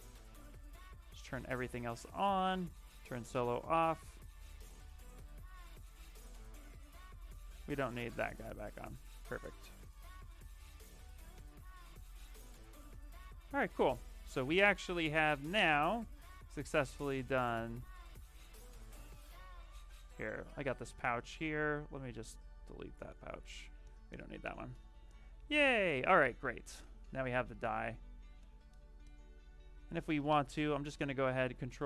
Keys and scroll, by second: 5.0 w, 13.3 q, 21.1 shift+f, 26.3 w, 31.3 ctrl+shift+d, 31.6 w.